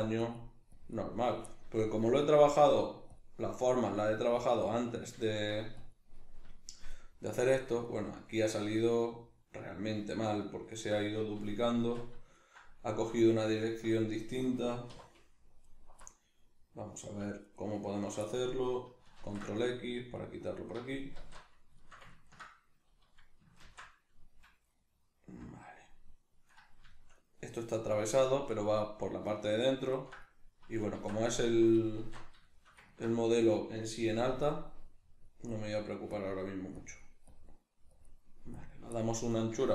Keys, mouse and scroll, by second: 1.4-2.6 middle drag, 2.6 click, 3.4 ctrl+middle click, 4.2-5.2 drag, 5.2 shift+middle click, 5.8 click, 6.2-13.5 middle drag, 11.7 Tab, 13.5 alt+right click, 14.0-15.6 middle drag, 14.9 2, 15.6 alt+right click, 16.0-17.4 middle drag, 17.4 alt+right click, 18.2-20.6 middle drag, 19.3 ctrl+x, 20.6 alt+right click, 21.2 alt+q, 21.8-39.7 shift+middle drag, 23.7 ctrl+x, 31.0 Tab, 32.0 alt+q, 34.2 f, 34.5 click.